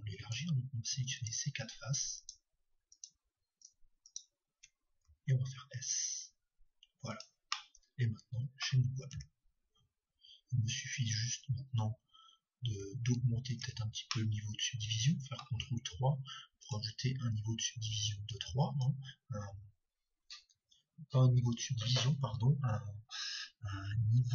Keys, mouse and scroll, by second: 2.5-7.1 right drag, 5.0 s, 8.3-9.3 drag, 8.3-9.5 middle drag, 9.3 Tab, 13.1 ctrl+3, 14.1-16.1 middle drag, 16.8-20.3 drag.